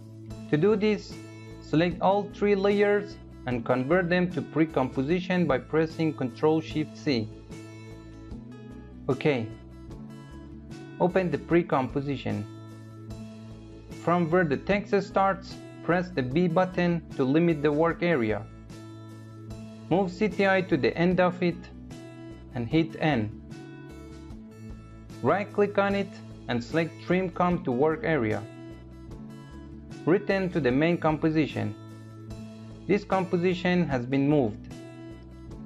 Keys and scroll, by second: 4.9 ctrl+shift+c, 16.1 b, 22.3 n.